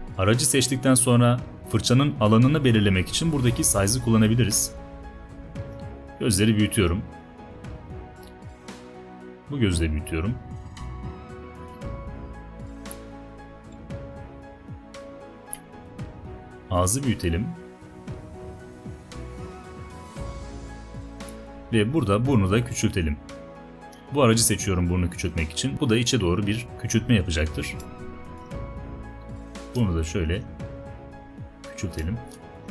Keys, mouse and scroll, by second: 14.7-15.7 alt+right drag, 27.9-28.9 alt+right drag, 29.8-30.8 alt+right drag, 32.4 alt+right click.